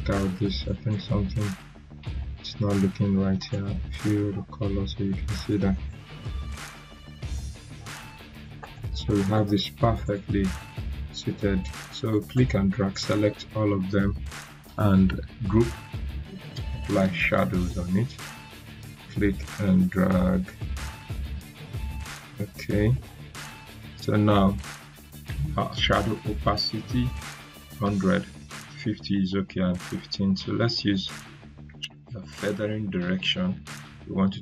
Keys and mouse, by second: 3.3 right click, 5.3-7.1 drag, 8.6 right click, 10.0 click, 12.5-12.9 drag, 19.0-20.2 drag.